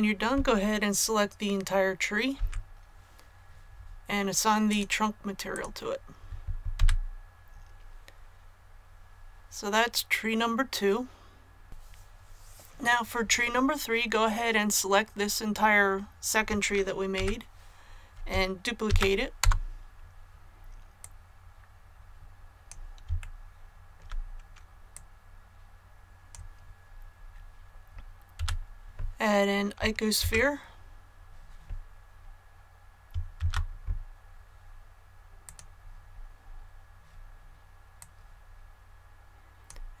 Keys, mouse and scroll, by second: 4.7 click, 6.7 a, 11.6 click, 18.8 shift+d, 19.4 Return, 21.0-23.0 drag, 23.2 shift+middle click, 24.9-27.0 drag, 28.3 a, 30.2 Tab, 33.3 shift+a, 35.4 click, 36.4 scroll down 1, 37.5-37.9 scroll down 1, 37.9-40.0 drag.